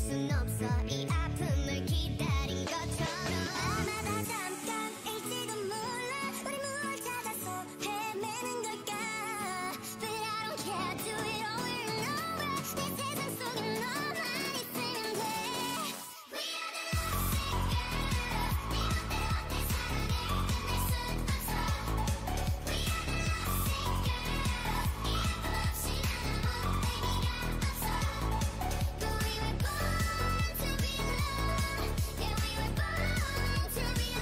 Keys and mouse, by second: 0.7-2.4 drag, 4.6-5.7 ctrl+KP_Add, 5.9 ctrl+KP_Add, 6.1 ctrl+KP_Add, 6.3 ctrl+KP_Add, 6.5 ctrl+KP_Add, 7.3 KP_3, 8.0 z, 9.4 x, 11.6-12.6 right drag, 12.6 e, 14.7 o, 17.8-19.8 drag, 20.6-23.1 right drag, 21.9 s, 23.5-25.2 drag, 24.6 z, 25.6-27.4 drag, 26.4 ctrl+z, 26.6-27.1 ctrl+z, 27.9 a, 28.2-30.6 drag, 29.3 s, 31.0-33.4 drag, 32.1 s.